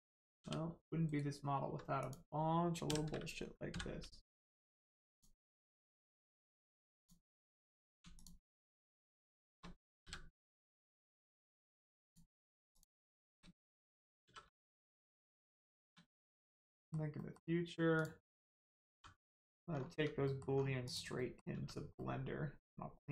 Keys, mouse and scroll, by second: 0.5 g, 1.0 right click, 1.9 click, 3.6 m, 5.0 click, 8.1 shift+click, 9.2 shift+click, 10.0 m, 12.0 click, 12.9 shift+click, 14.2 shift+r, 14.6 middle click, 15.3 shift+middle click, 16.1 middle click, 16.1 middle click, 17.9 click, 18.9 g, 19.3 right click, 19.7 scroll down 1, 20.2 middle click, 20.5-20.8 scroll down 1, 20.8 click, 21.1 middle click, 21.5 Tab, 21.9 middle click.